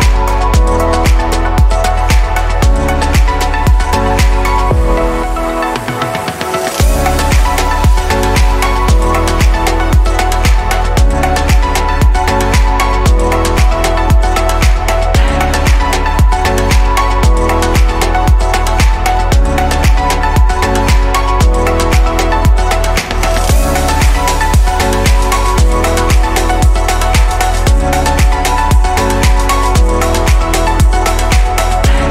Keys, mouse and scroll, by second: 0.0-3.0 middle drag, 9.2-11.5 middle drag, 11.7-13.4 middle drag, 13.4 ctrl+z, 13.7-15.8 middle drag, 15.8-17.0 drag, 20.8-22.7 middle drag, 22.7 click, 23.0-24.5 middle drag, 24.5 click, 25.7 click, 27.4-28.7 middle drag, 28.7 e, 31.9-32.1 middle drag.